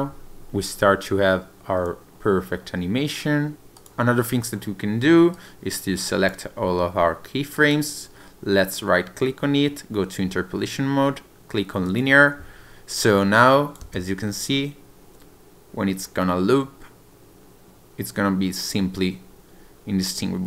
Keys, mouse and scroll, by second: 3.5 click, 3.8 click, 5.4 click, 13.4 click, 13.9 space.